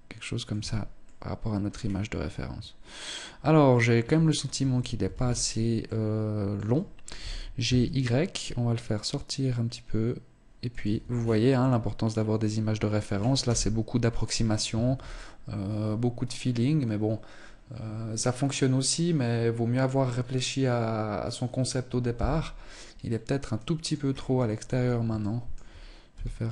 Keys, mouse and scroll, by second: 0.4 middle click, 1.1 scroll down 5, 1.6 middle click, 3.9 Tab, 4.4 a, 4.6 a, 5.2 middle click, 6.5 g, 10.3 Tab, 10.5-10.9 scroll down 6, 10.9 middle click, 12.8 KP_0, 13.6 scroll up 1, 14.3 ctrl+s, 22.4 middle click, 23.4-24.2 scroll up 8, 24.0 Tab, 24.7 shift+middle click, 25.5 g.